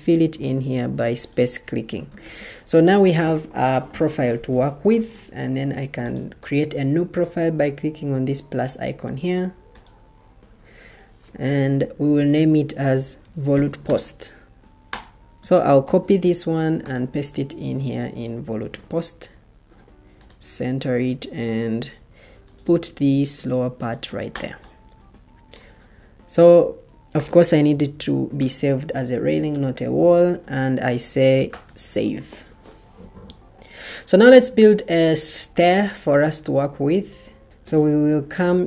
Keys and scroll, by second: 4.7 ctrl+d, 12.9-14.5 typing, 15.7 ctrl+c, 18.5 ctrl+v.